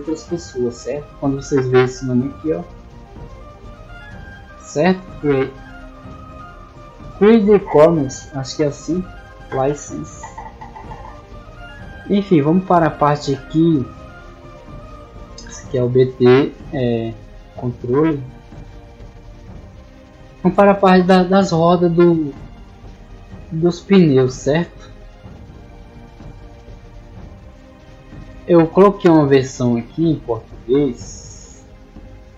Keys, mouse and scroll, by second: 0.6 middle click, 2.6-4.3 drag, 5.0-6.1 middle drag, 11.2-12.7 scroll down 2, 12.8 middle click, 17.8 middle click, 18.2 middle click, 18.5 middle click, 18.9 middle click, 25.2-26.2 drag, 29.5-30.6 drag, 31.4 click.